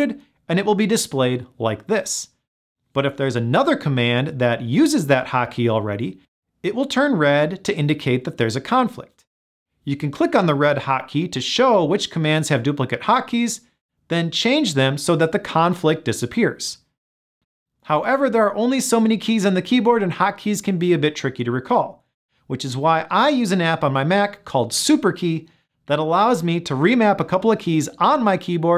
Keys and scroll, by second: 4.4 super+l, 14.3 ctrl+alt+shift+super+l.